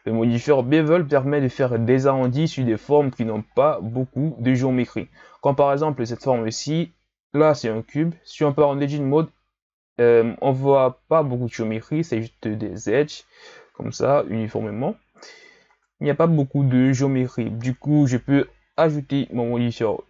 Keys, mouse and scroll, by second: 1.0-1.5 scroll up 5, 1.5-2.6 middle drag, 2.6-3.4 scroll up 5, 3.4-4.2 scroll up 7, 4.7-5.6 scroll up 4, 5.6 right click, 8.3 Tab, 15.7 Tab, 18.6 KP_1.